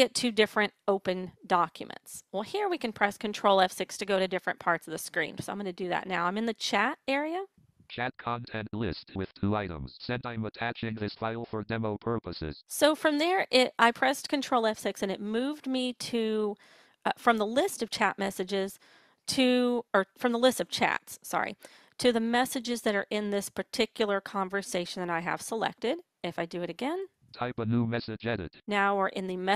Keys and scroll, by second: 3.0 ctrl+F6.